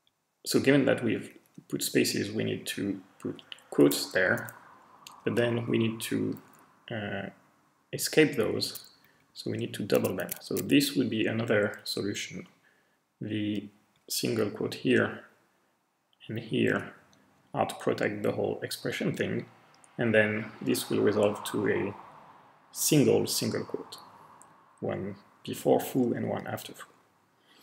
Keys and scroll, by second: 0.6 Left, 1.2 Left, 1.7-2.6 Right, 3.8 ', 4.8 Left, 5.0 Left, 5.3 Left, 5.4 Left, 5.6 Left, 6.3 Left, 8.6 typing, 8.9 Right, 9.1 Right, 9.3 Right, 9.4 Right, 9.9 typing, 13.8 Right, 14.8 Left, 15.3-15.7 Left, 20.0 Right, 20.5 Right, 20.6 Right, 20.8 Right, 20.9 Right, 23.8 Right, 25.3 Right, 25.9 Right.